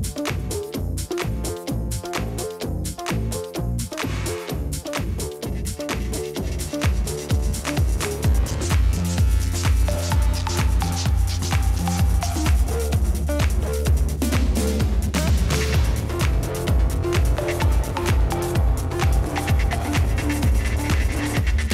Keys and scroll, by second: 9.1-13.5 typing, 14.5 ctrl+v, 18.1-19.5 typing, 20.1 ctrl+z, 20.6 ctrl+z, 21.3 ctrl+z.